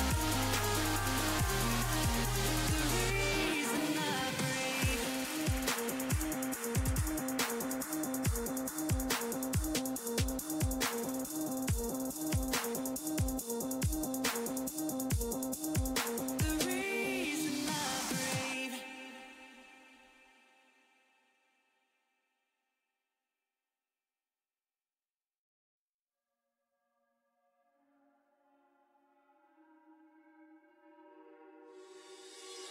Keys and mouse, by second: 4.3-7.4 middle drag, 7.4-12.7 drag, 17.7-30.0 drag, 30.0-32.7 middle drag.